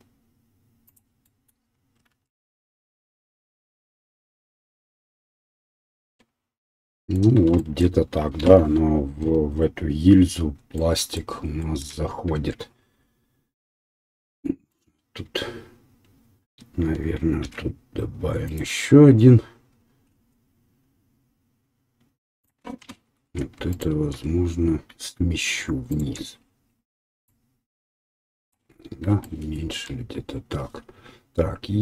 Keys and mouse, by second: 1.0-2.1 middle drag, 2.1 ctrl+r, 2.1-4.7 ctrl+drag, 3.7 ctrl+r, 4.7-14.7 middle drag, 6.0 Tab, 8.4 KP_1, 12.4 Tab, 14.7 click, 14.9-18.6 middle drag, 17.4 ctrl+r, 21.7-23.5 middle drag, 23.8-27.3 middle drag, 27.3-28.7 right drag, 28.7-29.8 drag, 29.8-31.8 right drag.